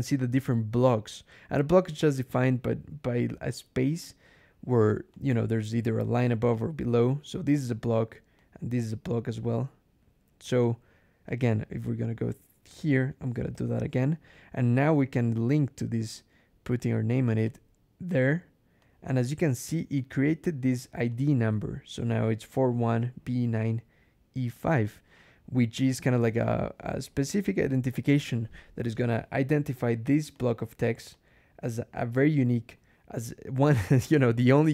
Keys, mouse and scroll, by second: 3.9 click, 5.0 click, 5.7 click, 6.7 click, 7.3 click, 8.2-9.9 drag, 10.3 click, 11.1 click, 11.7 Right, 12.2 BackSpace, 13.4 shift+6, 17.3 click, 18.7 click, 19.8 click, 21.0 click, 30.2 click.